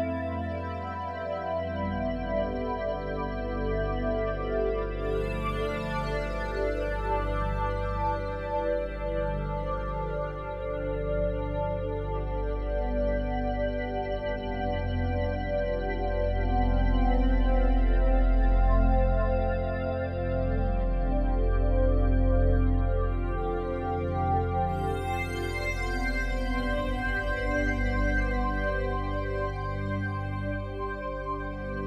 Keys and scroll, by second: 9.4 ], 21.8 ctrl+t.